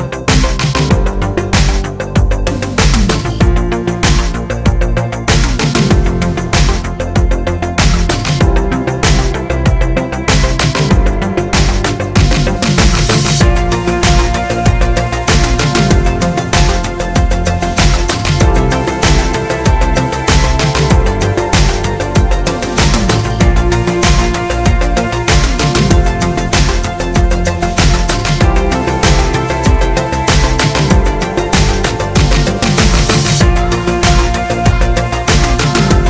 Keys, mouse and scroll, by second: 1.2 scroll, 1.9 Tab, 2.0 click, 3.0 KP_7, 3.8 click, 4.0 shift+click, 4.2 x, 4.4 click, 4.7 shift+click, 5.5 shift+d, 6.7 shift+middle click, 6.9 Tab, 7.2 a, 8.3 middle click, 8.3 g, 8.3 click, 8.4 scroll up 2, 8.5-10.2 shift+middle drag, 9.1 g, 10.2 click, 10.3 s, 12.0 Tab, 12.2 click, 12.4 Tab, 12.7 s, 13.9 click, 14.0 Tab, 14.2 click, 14.2-19.0 middle drag, 14.4 scroll down 2, 15.0 scroll up 2, 15.2 click, 15.5 shift+click, 16.1 scroll down 2, 16.5 KP_3, 17.0 z, 18.6 scroll down 2, 19.0 drag, 19.4 z, 19.6-23.4 shift+middle drag, 20.1 ctrl+s, 21.5 KP_3, 22.6 z, 22.7 scroll up 2, 23.4 shift+right click, 23.5-28.6 middle drag, 24.5 KP_3, 25.2 shift+a, 25.4-25.9 scroll down 2, 25.9-26.4 scroll down 1, 26.4 scroll down 1, 28.1 ctrl+z, 28.6 click, 28.7-30.4 middle drag, 29.2 KP_3, 29.8 shift+a, 29.9 Tab, 30.0 s, 30.4 click, 30.4 scroll up 2, 30.6 shift+middle click, 30.9-32.1 scroll down 2, 32.1 middle click, 32.1 1, 32.4 click, 32.7 g, 33.8 click, 34.0 g, 35.9 click.